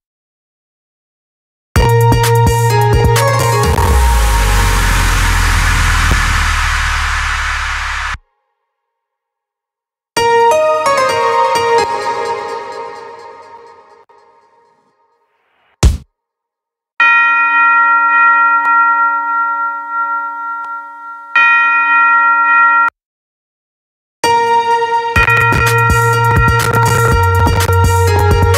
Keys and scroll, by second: 7.5 space, 9.6 space, 11.2 space, 23.6 space, 28.4 space.